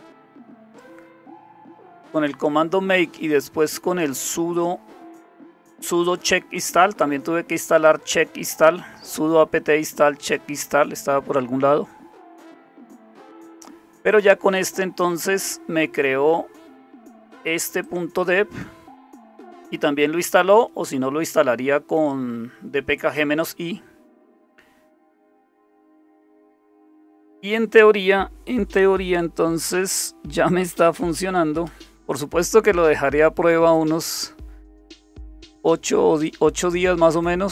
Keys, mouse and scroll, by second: 1.8-4.6 scroll up 1, 4.6 scroll up 1, 5.3-9.1 scroll up 1, 9.1-10.4 drag, 14.1 click, 14.6-17.8 scroll down 7, 17.8-20.0 drag, 25.4 click, 30.4-31.6 typing, 33.8 click, 33.9-34.8 typing, 34.1 click, 36.7 click.